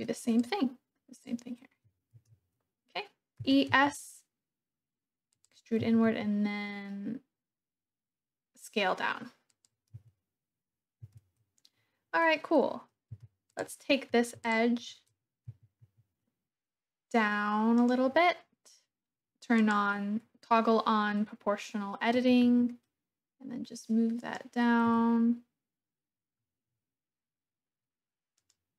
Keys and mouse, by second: 0.5 click, 2.1 ctrl+z, 3.3 e, 3.6 s, 5.3 click, 5.8 s, 6.1 z, 9.4 click, 10.0 Tab, 11.0 Tab, 13.1 2, 14.5 alt+shift+click, 15.4 g, 15.8 z, 17.7 click, 19.5 click, 22.2 g, 22.5 z, 24.2 click, 24.9 g, 28.4 click.